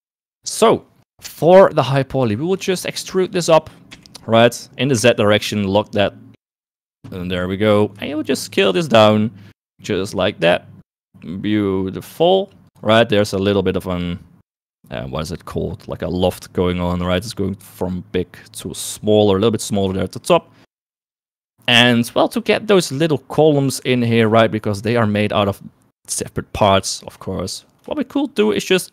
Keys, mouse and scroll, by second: 0.0 click, 0.7 Tab, 2.4 shift+middle click, 3.0 a, 3.1 shift+middle click, 4.0 e, 8.2 shift+middle click, 8.8 s, 20.9 shift+middle click, 28.3 shift+middle click, 28.8 shift+middle click.